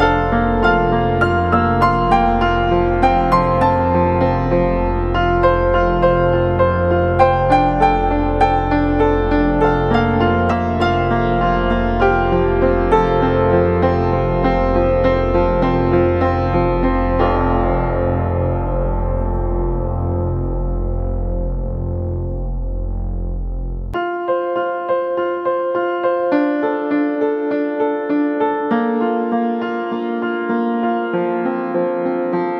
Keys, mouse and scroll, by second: 12.7 scroll down 1.